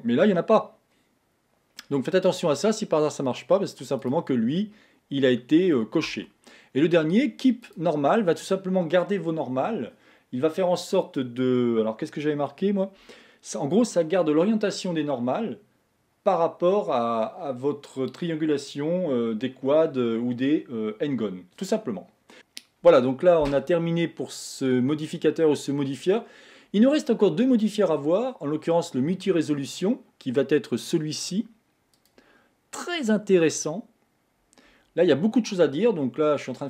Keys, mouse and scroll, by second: 4.1 click, 7.7 click, 32.0-35.0 drag.